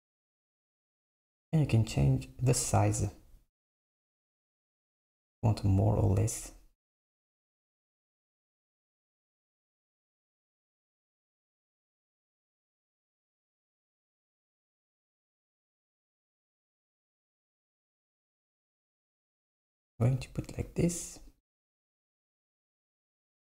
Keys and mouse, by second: 2.5-5.6 drag, 9.5 z, 13.3 click, 14.6-17.7 drag, 21.4-23.5 drag.